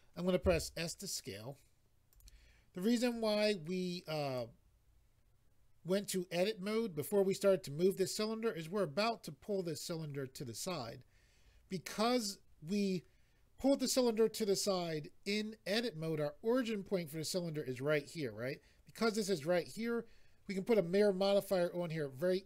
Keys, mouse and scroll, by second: 2.1 click, 3.1 click, 8.6 click.